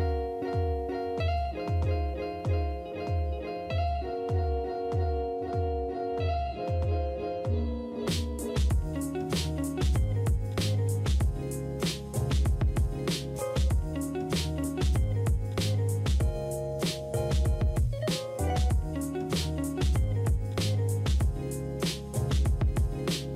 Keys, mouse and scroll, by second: 0.2 ctrl+click, 0.7 s, 9.2 typing, 14.3 typing, 18.5-19.0 typing, 21.0-23.3 drag.